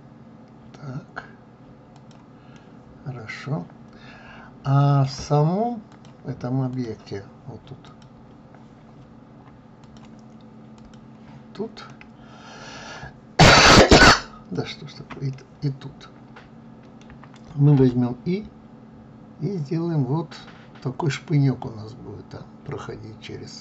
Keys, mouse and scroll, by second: 2.1-5.1 middle drag, 5.4-7.5 drag, 9.4 click, 10.3 click, 11.4-14.1 middle drag, 14.1 shift+click, 14.8-17.3 middle drag.